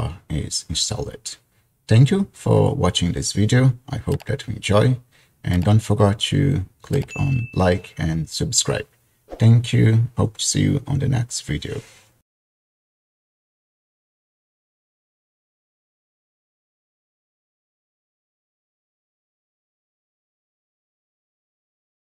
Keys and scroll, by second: 0.9 typing.